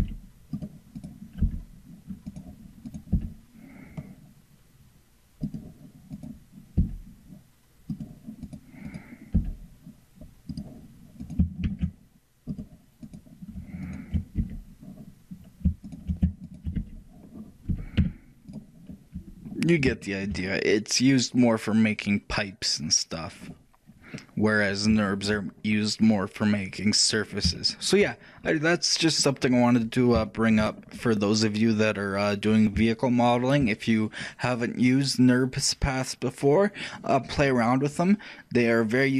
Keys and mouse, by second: 0.1 g, 1.2-3.2 right drag, 3.2 e, 9.4 e, 11.7 shift+d, 15.7-19.6 shift+right drag, 17.8 g, 19.6-23.2 middle drag, 23.6-33.0 middle drag, 33.2-36.1 shift+middle drag.